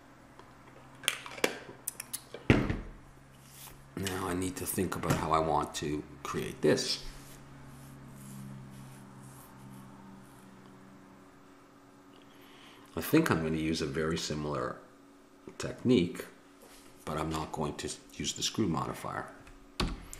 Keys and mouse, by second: 19.8 n.